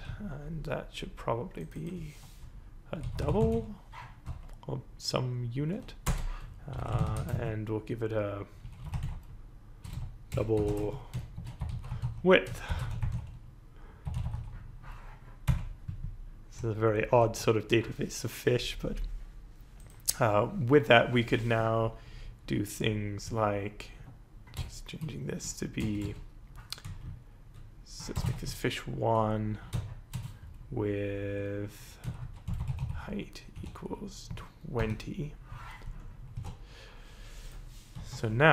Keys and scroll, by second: 0.0-0.3 typing, 2.8-4.0 typing, 4.2 End, 6.0 Return, 6.4-15.5 typing, 17.2 ctrl+s, 23.9 Right, 24.5 BackSpace, 26.8 Left, 27.4 Left, 27.4 Left, 28.1 BackSpace, 28.2 1, 28.4 Right, 28.9 Right, 29.0 Right, 29.1 Right, 31.9-34.7 typing, 36.3 ctrl+s, 37.9 Up.